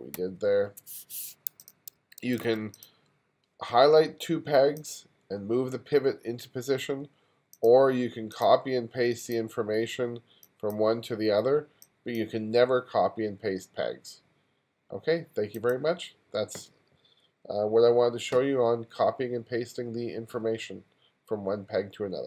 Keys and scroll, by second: 1.9 2.